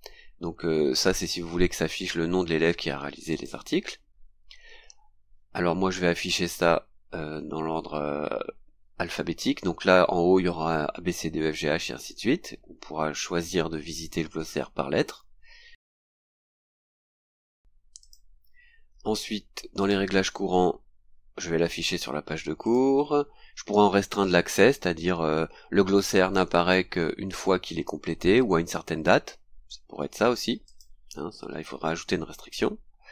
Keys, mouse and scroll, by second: 3.3 click, 4.8 scroll down 2, 15.7-16.0 scroll down 1, 18.0 click, 19.8 click, 20.8-21.2 scroll down 2, 22.6 click, 30.6 click.